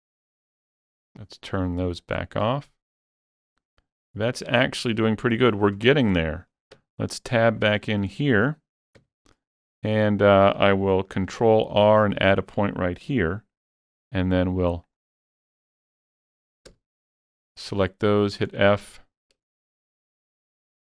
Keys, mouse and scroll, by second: 1.0 click, 2.0-5.9 middle drag, 5.5 scroll up 2, 6.2 shift+middle click, 6.8 Tab, 7.1 shift+middle click, 7.9 scroll up 1, 8.2 shift+middle click, 9.0 1, 9.5-14.4 shift+middle drag, 11.3 ctrl+r, 12.4 click, 14.4 shift+click, 14.9 shift+click, 15.6 shift+click, 16.7 f, 18.9 middle click.